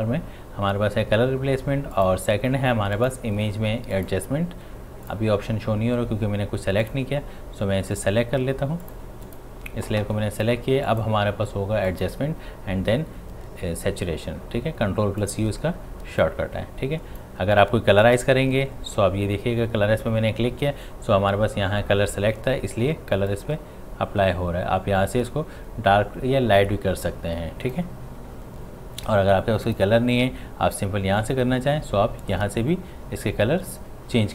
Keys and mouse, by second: 2.0 click, 15.2 click, 15.2-18.1 drag, 23.3-34.3 drag.